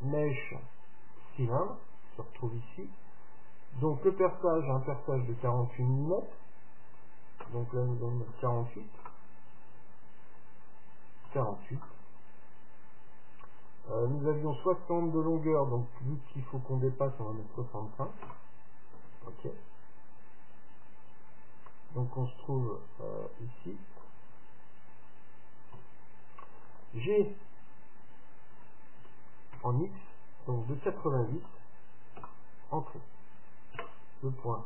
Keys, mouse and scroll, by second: 7.1-9.0 drag, 10.3-12.2 drag, 13.7-15.6 drag, 21.8-23.7 middle drag, 25.8 KP_7, 29.1 g, 33.8 KP_Decimal.